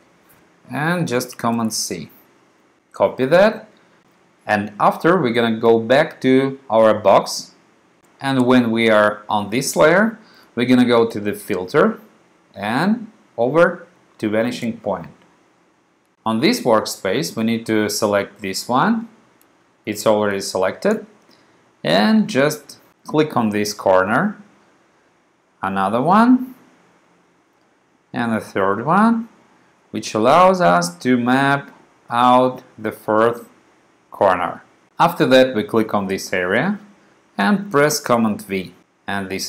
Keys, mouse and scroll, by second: 1.7 super+c, 7.1 click, 11.3 click, 14.7 click, 23.3-24.8 drag, 26.7 click, 29.0 click, 34.4 click, 35.9 click, 38.0 super+v.